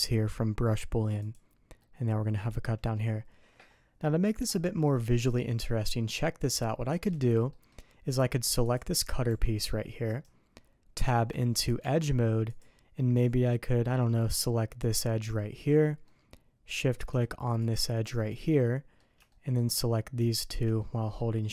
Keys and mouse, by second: 1.7-2.9 middle drag, 4.8-7.0 middle drag, 7.4 middle click, 8.6 click, 9.3 g, 11.0 Tab, 11.8 Tab, 13.1 middle click, 13.4 click, 14.8 click, 16.0 middle click, 17.6 shift+click, 18.2 middle click, 19.2 shift+middle click, 20.2 shift+click, 20.7 middle click.